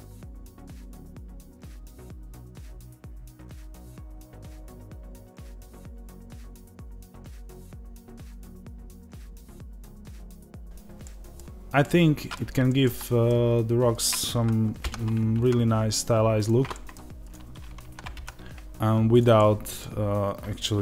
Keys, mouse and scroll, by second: 0.0 click, 0.2 middle click, 1.2-2.3 drag, 2.3 ctrl+b, 6.6-7.7 middle drag, 7.7 click, 8.4 ctrl+b, 10.1 click, 10.3 middle click, 10.7 click, 10.9-13.8 middle drag, 13.8 click, 14.7 ctrl+b, 16.3 click, 16.6 middle click, 17.1 click, 17.7 ctrl+b, 19.0 click, 19.2-20.3 middle drag, 20.3 click, 20.7 ctrl+b.